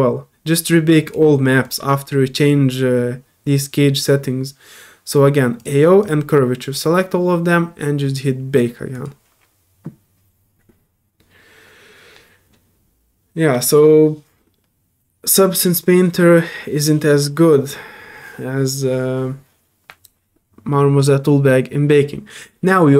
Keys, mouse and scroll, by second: 1.0 click, 1.6 click, 5.6 click, 6.0 click, 8.9 click.